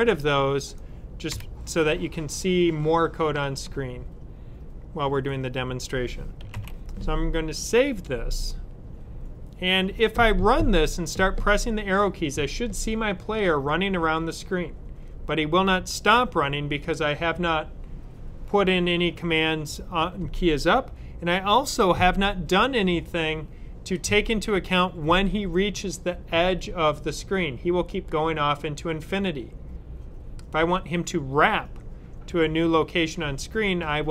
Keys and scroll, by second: 6.4 super+s.